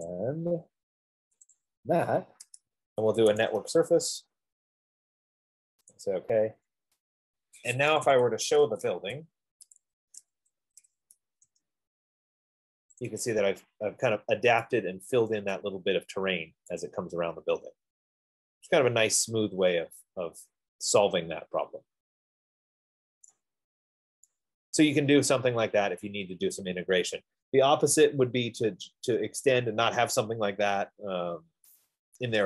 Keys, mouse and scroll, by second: 0.5 shift+click, 1.8 shift+click, 4.4 Return, 6.4 Escape, 8.8 click, 8.8-13.0 typing, 9.2 Return, 9.2 Escape, 11.8 Return, 15.4-16.1 typing, 16.0 right click, 16.4 middle click, 18.0 F15, 18.0 click, 20.9 scroll, 23.5 right click, 24.2 middle click, 26.3 right click.